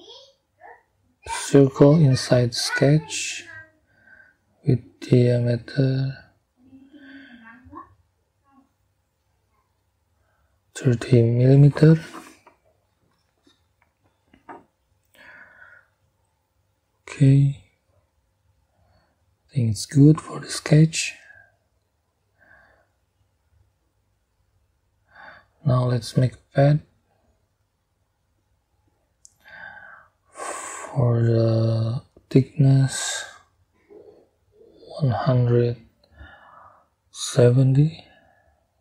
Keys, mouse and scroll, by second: 2.0 middle click, 3.3 middle click, 3.5 click, 4.0 right click, 5.7 click, 8.2 click, 9.4 click, 13.8 3, 14.3 0, 16.8 click, 22.5 click, 23.6 scroll down 1, 24.3 scroll up 2, 28.1 click, 32.0 click, 33.3-34.5 drag, 36.0 1, 36.8 7, 37.5 0.